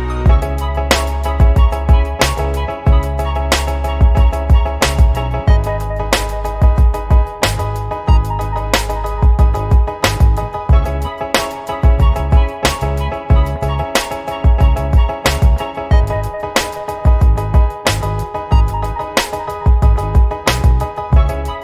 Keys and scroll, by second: 17.0 i, 20.4 alt+BackSpace.